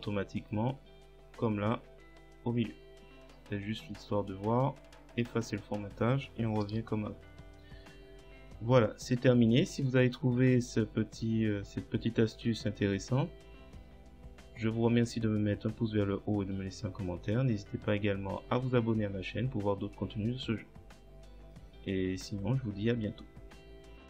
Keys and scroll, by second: 6.7 Delete.